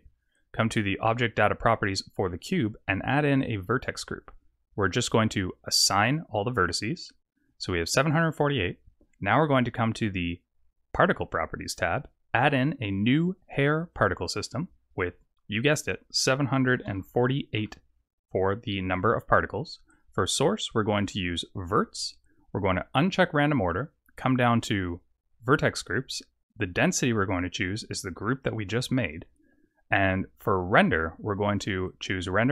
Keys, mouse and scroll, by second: 3.6 click, 5.9 click, 10.9 click, 12.3 click, 13.9 click, 15.7 click, 19.9 click, 20.7 click, 22.9 click, 25.3 click, 26.6 click, 30.7 click, 31.8 click.